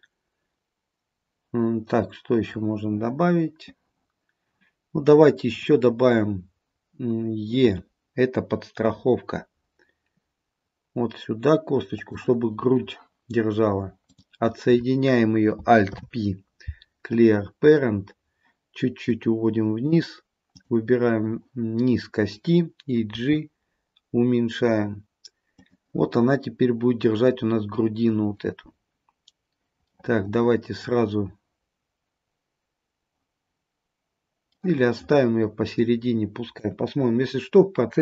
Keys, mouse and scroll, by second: 5.6 click, 7.8 e, 14.2 click, 16.0 alt+p, 19.2 click, 20.6 click, 23.2 g, 30.0 middle click, 34.7 middle click, 36.7 KP_3.